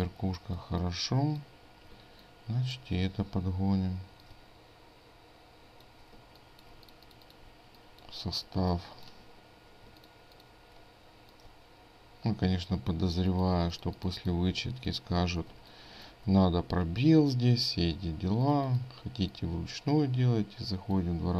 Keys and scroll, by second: 2.0 ctrl+space, 9.9 ctrl+space, 13.6 ctrl+space, 15.6 ctrl+space.